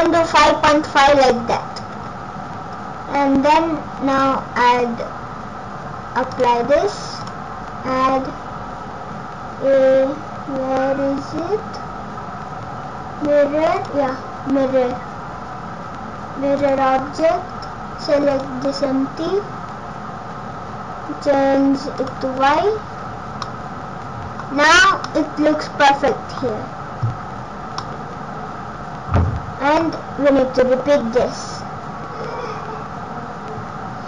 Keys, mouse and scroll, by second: 2.0-2.5 scroll down 1, 2.5-2.9 scroll up 3, 2.9 scroll down 2, 4.2 click, 6.4 click, 7.2 click, 14.7 scroll down 1, 16.6 click, 22.1 click, 22.5 click, 23.0-23.4 scroll down 4, 23.4 scroll up 1, 23.5 middle click, 24.5 scroll up 4, 25.0 middle click, 27.3-28.4 scroll down 7, 27.8 middle click, 30.1 scroll up 4, 31.0-31.5 scroll down 3, 32.0 scroll down 4, 33.2-33.7 scroll down 1.